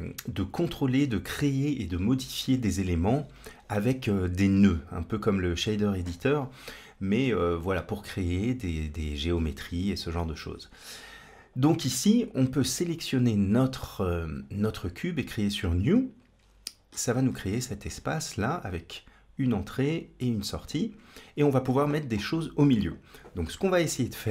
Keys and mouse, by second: 11.1 click, 15.7 click, 17.4 middle click.